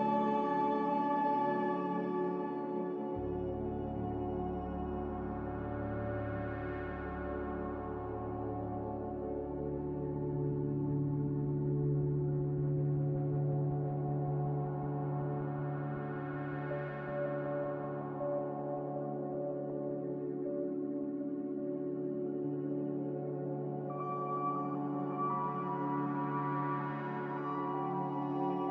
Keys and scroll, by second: 0.5 n, 7.3 z, 22.8 z.